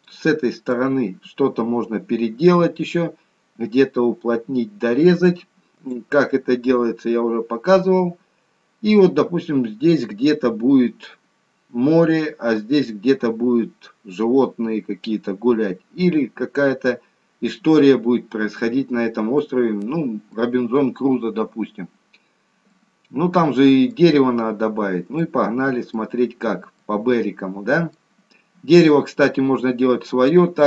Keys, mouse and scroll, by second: 0.0 middle click, 2.3 scroll up 5, 6.9-8.6 scroll down 3, 8.6-9.9 scroll up 1, 17.2-18.7 scroll down 2, 18.7 scroll up 2, 19.3 middle click, 21.4-21.8 scroll up 2, 21.9-22.6 scroll down 5, 22.6 middle click, 24.1-24.7 scroll up 3, 24.7 scroll down 2, 25.4 middle click, 26.1-26.7 scroll down 2, 26.7 middle click.